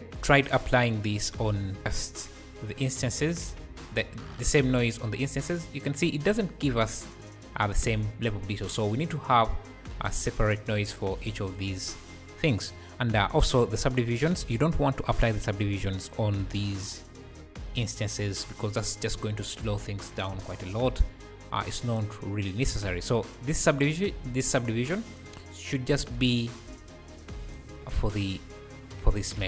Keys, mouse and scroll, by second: 0.8-1.8 scroll up 1, 1.8 click, 3.1-4.8 drag, 5.3 `, 5.7-7.3 scroll up 3, 9.1-10.1 drag, 11.4-18.7 drag, 17.2 ,, 18.7 m, 19.3-19.7 scroll down 2, 20.3 q, 21.0 q, 21.6 q, 22.1 q, 23.0-23.3 scroll up 2, 23.6-25.5 drag, 26.0 click, 28.1 `.